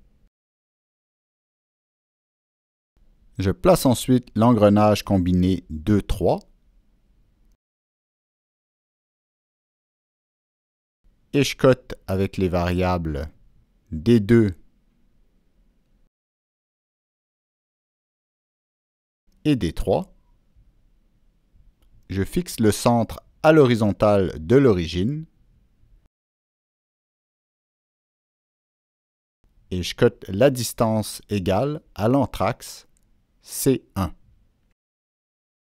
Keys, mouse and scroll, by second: 0.3 ctrl+scroll down 1, 0.6 ctrl+scroll, 0.7-1.1 ctrl+scroll up 2, 1.1 ctrl+scroll, 1.5 ctrl+middle click, 2.4 right drag, 3.5 click, 3.5 right click, 3.6 ctrl+middle click, 3.6 right click, 4.3 click, 5.6 click, 6.5 click, 7.5 Escape, 7.5 click, 7.9 right click, 9.0 click, 9.1 Escape, 9.1 right click, 9.7 click, 12.2 click, 12.5 Down, 13.0 Return, 14.7 click, 14.7 Return, 14.7 Down, 16.1 click, 16.9 click, 17.0 Return, 19.2 Down, 19.2 click, 20.4 Down, 20.4 Return, 20.4 click, 21.4 Return, 21.4 Down, 21.9 Return, 21.9 Down, 21.9 click, 24.8 click, 25.8 shift+click, 27.2 click, 29.2 right drag, 30.9 click, 30.9 right click, 32.1 click, 32.3 right click, 33.1 click.